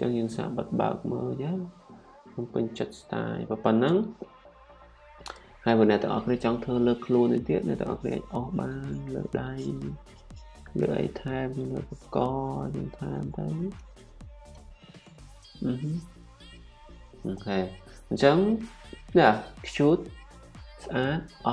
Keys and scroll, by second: 1.3-3.0 typing, 5.8 ᑌ, 8.6 typing.